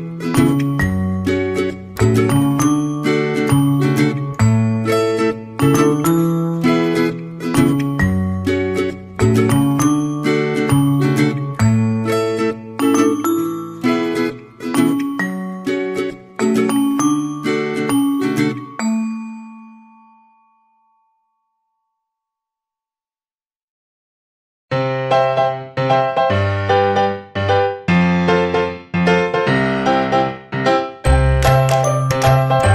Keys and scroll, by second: 9.0 ctrl+z.